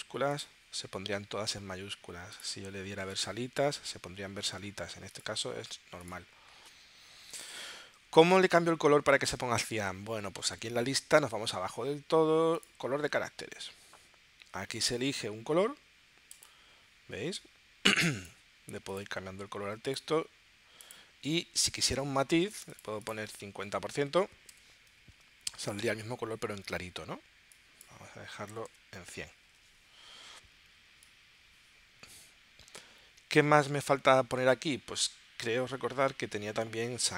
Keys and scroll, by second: 24.1-25.0 typing, 25.2 Tab, 28.1-29.0 typing, 29.4 Tab.